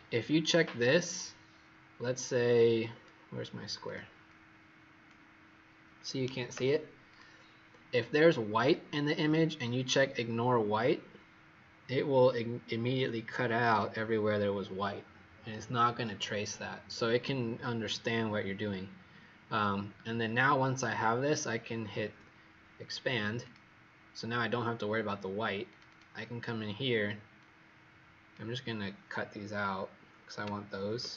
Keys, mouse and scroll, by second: 2.8-3.8 scroll up 4, 3.8 click, 4.2 click, 7.0 click, 25.8 click, 27.3 click, 30.7 ctrl+x.